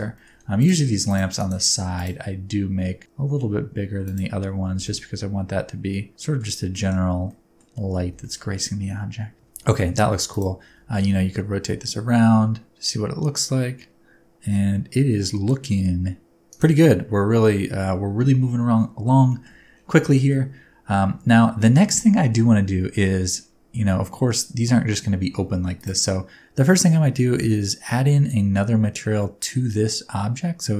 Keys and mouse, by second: 0.1 shift+middle drag, 0.6 click, 1.5-4.1 drag, 4.7 g, 4.8 middle click, 6.1 middle drag, 6.8 middle click, 7.4 middle click, 8.0 g, 8.2 middle click, 9.7 middle click, 10.3 click, 10.6 r, 10.9 z, 16.5-17.4 drag, 17.6 shift+middle click, 19.3 shift+middle click, 20.1 shift+middle click.